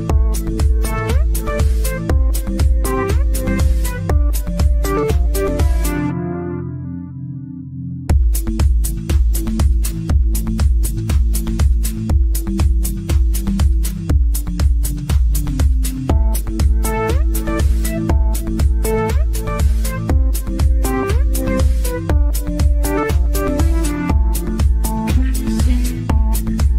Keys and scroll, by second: 7.1 Escape, 8.4 Delete.